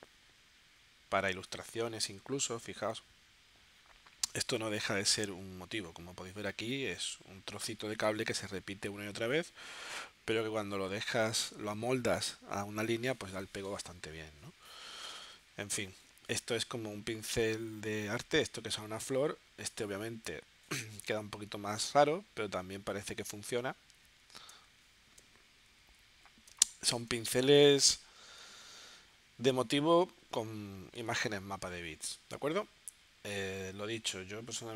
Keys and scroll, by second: 24.6 space, 25.7 z, 26.5 space, 31.2 v.